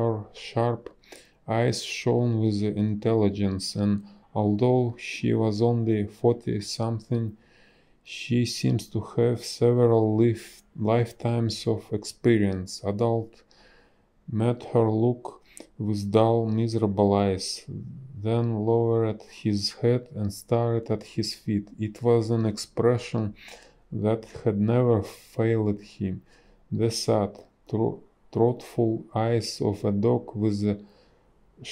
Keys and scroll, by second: 1.1 Delete, 12.0 space, 13.6 space, 17.6 b, 18.0 space, 28.2 space.